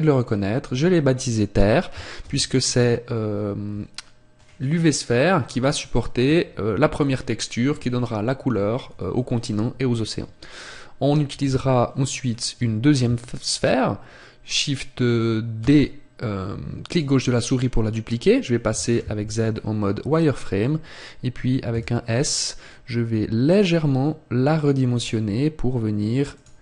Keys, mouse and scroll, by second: 2.3 ctrl+space, 12.3-13.9 scroll up 1, 15.7 shift+d, 17.0 click, 19.5-20.5 scroll up 1, 19.5 z, 21.0 scroll up 1, 26.5 click.